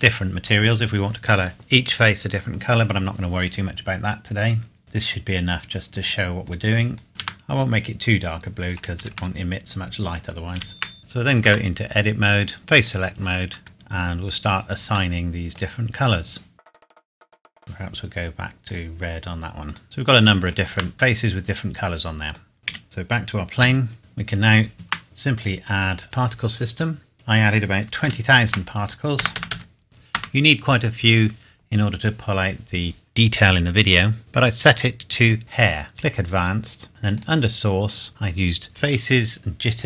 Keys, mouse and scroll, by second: 4.8 Return, 6.4 click, 7.1 ctrl+c, 7.6 scroll down 1, 9.0 ctrl+v, 9.4 scroll down 1, 10.6 ctrl+v, 11.0 scroll up 1, 11.1 middle click, 11.4 Tab, 11.8-12.8 scroll down 1, 12.8 click, 15.1 middle click, 16.0 click, 16.8 middle click, 16.9 click, 17.4 middle click, 17.6 click, 19.8 middle click, 20.7 Tab, 21.2 middle click, 22.4-23.2 scroll down 2, 22.6 click, 22.7 KP_Decimal, 23.6 KP_7, 24.0 click, 24.7 ctrl+s, 25.4 click, 28.0 KP_2, 28.5 KP_0, 30.1 KP_Enter, 35.4 click, 36.4 click, 37.2 click.